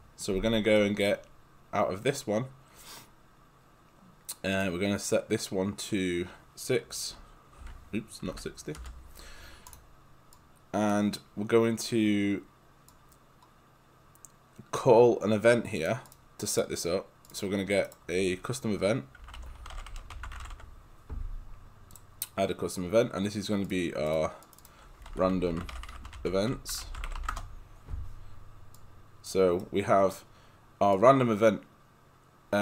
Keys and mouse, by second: 0.8 right click, 4.6 click, 7.1 6, 8.3 Delete, 8.8 Return, 9.7 click, 15.9 click, 16.5 right click, 17.3 click, 17.9 right click, 18.9-21.1 typing, 22.0 click, 24.9-27.7 typing, 28.3 Return, 28.8 click, 29.6 right click, 30.9 click.